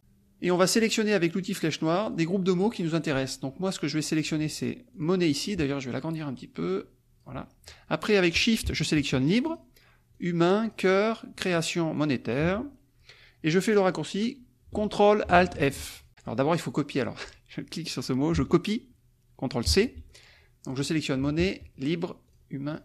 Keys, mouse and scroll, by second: 2.0 click, 4.9 click, 5.7-7.4 ctrl+drag, 7.4 ctrl+middle click, 9.5 shift+click, 10.2 shift+click, 10.7 shift+click, 11.3 shift+click, 11.9 shift+click, 16.1 click, 16.9 click, 19.6 ctrl+c, 20.0 ctrl+click, 20.8 click, 21.3 shift+click, 22.2 shift+click, 22.7 shift+click.